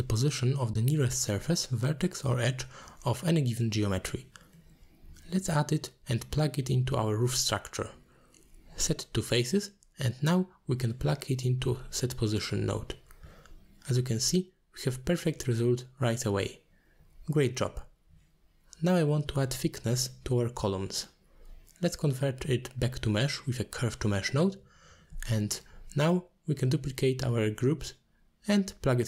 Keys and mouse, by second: 1.1 middle click, 2.9-4.6 drag, 5.0 middle click, 5.5 shift+click, 6.0 g, 7.9 middle click, 8.7-10.3 drag, 11.2 middle drag, 12.5 middle click, 13.9-14.5 drag, 15.4 click, 16.0 click, 16.3 click, 17.6 middle click, 18.0-18.5 drag, 19.1-22.6 drag, 22.9 alt+shift+click, 23.4 middle click, 24.8 click, 25.2 shift+d, 26.5 click, 28.4-28.7 shift+drag.